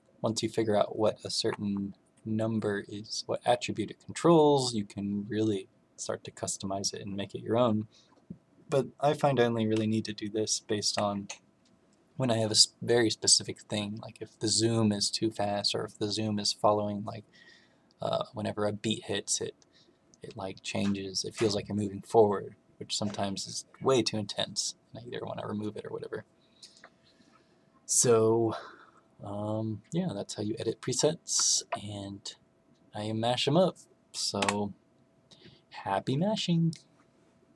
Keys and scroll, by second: 1.3 Up, 1.6 Up, 10.8 Escape, 34.3 Escape.